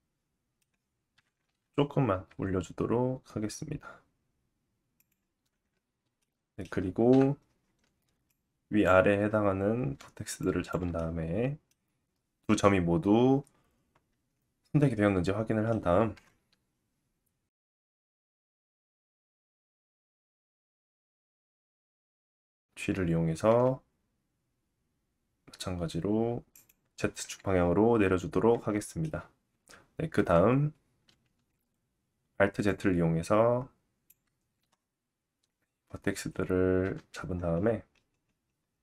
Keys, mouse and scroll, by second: 1.2 KP_1, 2.3 g, 5.1-8.3 middle drag, 7.1 KP_7, 8.3 click, 10.4 shift+click, 10.9 middle click, 17.1 middle click, 18.5 KP_1, 20.0 g, 29.3 Tab, 29.5 KP_1, 30.2 Tab, 31.3 alt+z, 32.7-38.8 drag, 36.8 g.